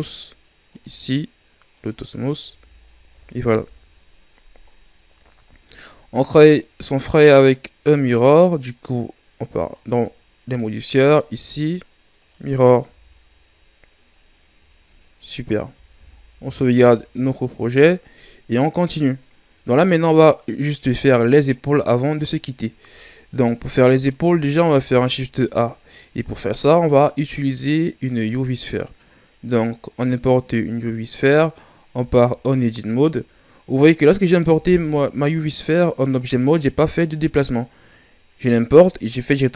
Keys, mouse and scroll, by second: 0.7-1.9 drag, 2.4 a, 2.8-3.6 scroll down 4, 3.6 KP_1, 4.7-5.5 scroll down 2, 5.5-5.9 scroll down 1, 5.9-6.8 scroll up 4, 6.8-7.9 right drag, 9.7-12.8 drag, 12.8 a, 13.3-14.1 scroll down 2, 14.1-14.5 scroll down 3, 15.8 ctrl+s, 16.4 ctrl+scroll down 3, 17.1-17.5 shift+scroll up 2, 17.7-18.2 ctrl+scroll up 3, 24.6 shift+a, 31.1-31.9 ctrl+scroll up 4, 31.9 Tab, 34.5 Tab.